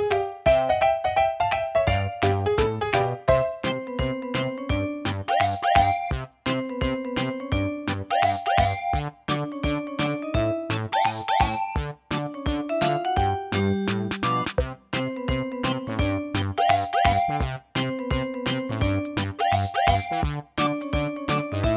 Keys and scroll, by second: 0.7-3.5 typing.